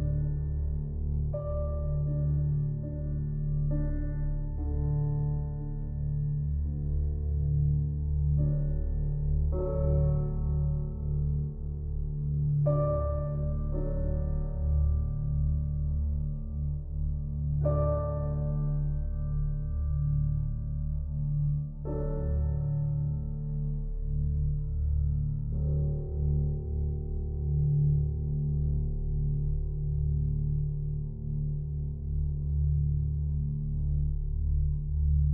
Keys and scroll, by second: 30.5 shift+s.